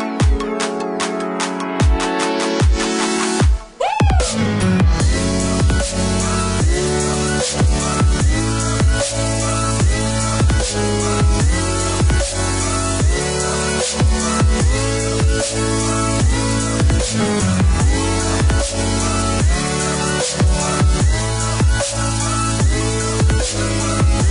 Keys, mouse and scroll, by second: 0.4 click, 1.8 space, 2.4 click, 3.0 click, 3.4-4.6 scroll up 1, 4.6 click, 8.8 click, 14.2 click, 15.2-16.4 typing, 16.7 KP_Enter, 17.4 Escape, 18.3 click, 19.1 space, 19.7 click, 22.5 click.